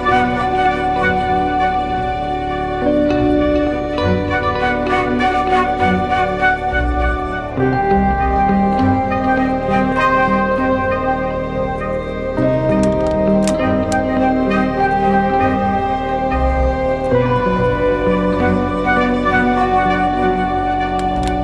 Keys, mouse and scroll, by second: 20.2 double click.